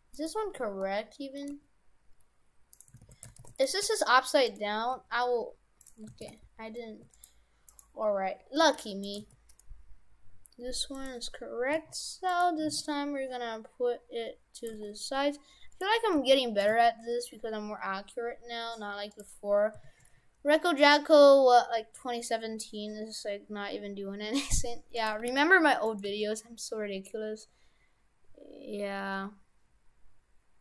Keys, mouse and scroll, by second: 0.2 right click, 0.8 middle click, 1.6 g, 3.0 shift+f, 4.0 g, 5.0 g, 6.2 shift+f, 7.7 right click, 8.6 g, 10.7 g, 11.8 s, 12.6 s, 14.8 g, 16.2 g, 16.7 g, 20.9 s, 25.2 g, 26.1 g.